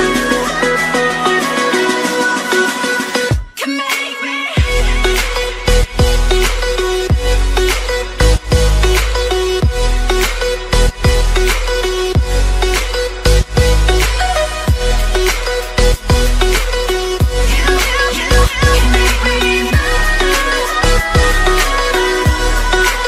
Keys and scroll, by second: 13.3 ctrl+j.